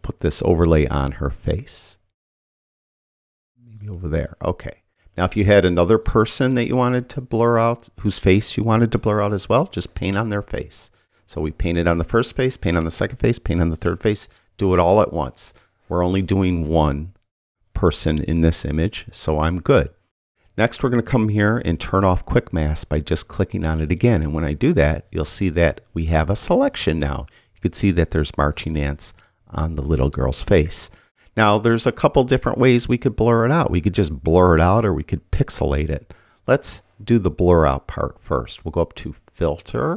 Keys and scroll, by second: 28.6 [.